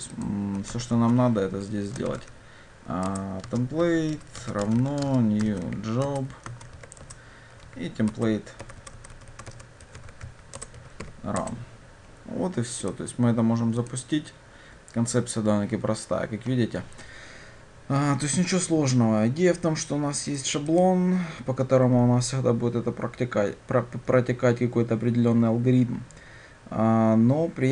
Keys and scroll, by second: 0.8 Tab, 3.2 Return, 14.0 ctrl+shift+F10.